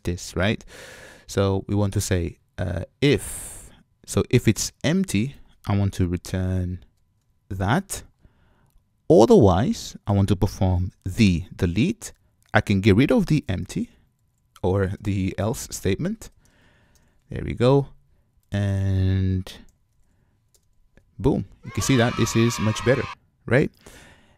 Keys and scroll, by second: 6.3 alt+shift+Up, 11.6 super+x, 19.7 super+y, 20.8 super+v, 21.7 super+v.